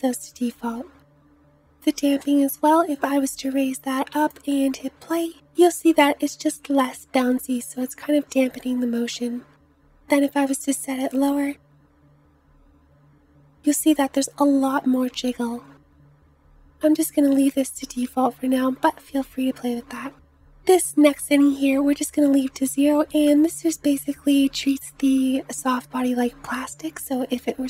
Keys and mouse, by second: 3.7 space, 7.3 space, 11.8 space, 16.0 space.